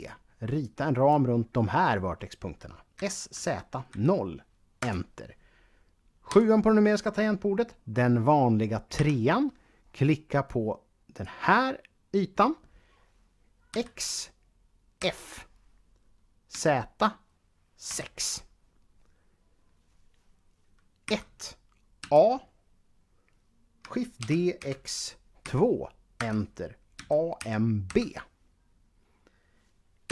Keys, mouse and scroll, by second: 0.3 click, 2.7-3.7 typing, 4.6 Return, 6.1 KP_7, 8.8 3, 9.7 scroll up 1, 10.9 click, 11.8-13.3 scroll down 1, 13.6 x, 14.8 f, 16.3 z, 17.7 6, 20.9-21.8 typing, 24.0-25.2 typing, 25.9 Return, 26.8 a, 27.2 m, 27.7 b, 29.8 KP_1.